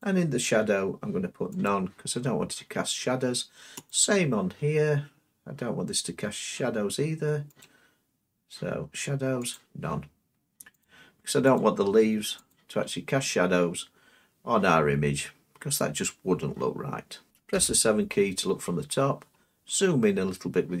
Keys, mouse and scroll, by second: 0.0-1.1 drag, 1.6-2.7 drag, 3.9-4.9 drag, 7.6-8.7 drag, 9.5-10.6 drag, 10.8-13.6 drag, 14.5-15.6 middle drag, 16.6 middle click, 17.5 7, 19.3 middle click, 19.8-20.8 scroll up 7.